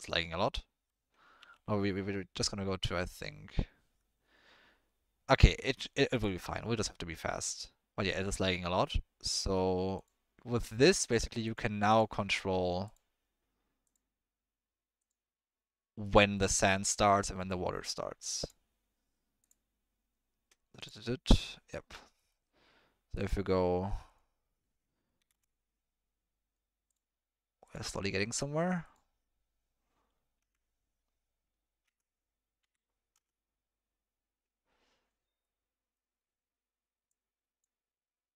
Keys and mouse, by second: 0.0-1.0 middle drag, 2.6 z, 10.0-11.1 drag, 11.9 drag, 14.2-16.1 drag, 16.1 middle click, 17.0-17.4 middle drag, 18.4 click, 20.8 click, 22.2 middle click, 23.2-25.3 drag, 27.0-34.0 drag, 35.4-36.0 middle drag, 37.1-37.7 drag.